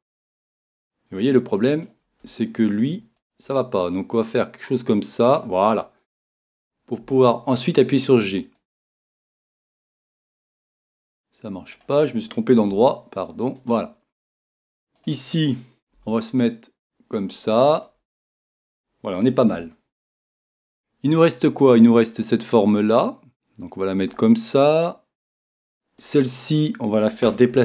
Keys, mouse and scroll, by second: 1.8 click, 3.7-5.4 right drag, 4.2 click, 7.1 g, 8.7 click, 10.7 super+z, 11.8-13.6 right drag, 12.7 g, 13.7 click, 15.6-17.4 right drag, 17.9 click, 18.3-19.6 middle drag, 19.7-21.4 middle drag, 23.0 click, 23.0-24.1 right drag.